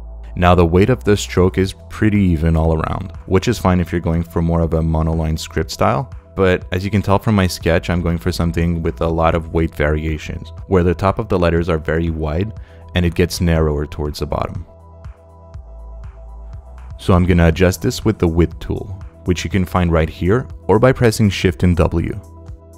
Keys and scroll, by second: 6.2 space, 14.6 space.